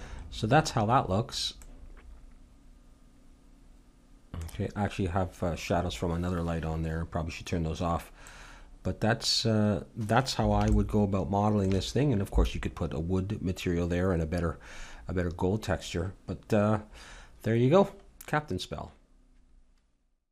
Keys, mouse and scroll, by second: 8.3-10.3 middle drag, 10.9-12.7 middle drag.